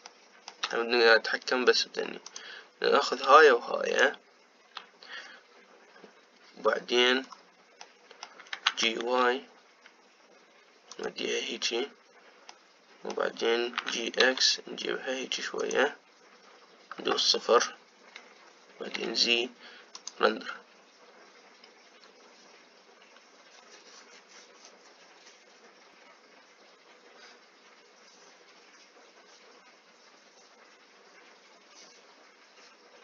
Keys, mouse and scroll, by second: 3.1-7.7 drag, 8.0-8.6 scroll down 2, 8.6 middle click, 9.4 g, 13.3-14.5 middle drag, 14.5 g, 17.8 KP_0, 19.8 z.